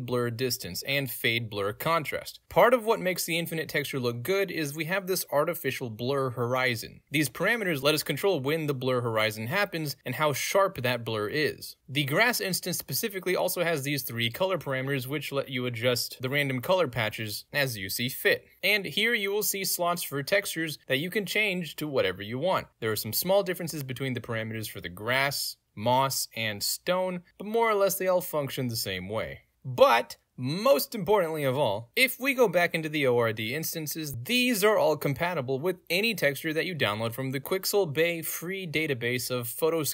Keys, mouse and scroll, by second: 5.3 ctrl+z, 5.4-6.9 drag, 7.3 ctrl+z, 7.4 click, 10.0 click, 11.8 ctrl+z, 13.1 click, 14.0 click, 15.4 ctrl+z, 15.6 click, 16.4-18.6 drag, 20.4-20.9 drag, 21.0-21.6 drag, 21.7 scroll down 2, 21.8-22.4 drag, 22.7-23.2 drag, 25.2 click, 26.5 click, 28.0 click, 28.6 click, 30.2 click, 30.8 click, 31.0 click, 32.2 click, 33.0 click, 33.8 click, 33.9 click, 35.3 click.